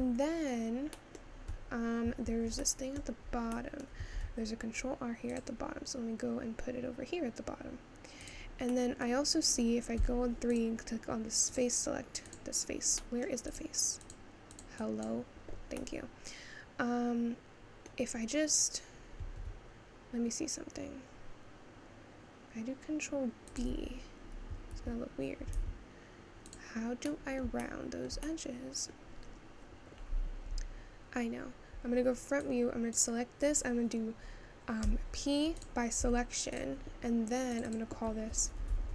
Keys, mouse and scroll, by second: 0.0 Tab, 0.3-1.0 scroll down 2, 1.0-3.0 middle drag, 3.0 scroll up 2, 3.7 middle click, 4.3 ctrl+r, 8.8-10.1 middle drag, 10.1 3, 10.6 click, 11.6 click, 13.1 middle click, 13.7 click, 14.1 click, 15.9-19.4 middle drag, 19.4 ctrl+b, 23.9 Tab, 25.0 ctrl+z, 25.6 ctrl+z, 26.5 click, 27.2-29.2 middle drag, 29.2-31.8 scroll up 2, 33.0 click, 35.7 p, 36.0 Tab, 36.6 click, 37.6-38.9 drag.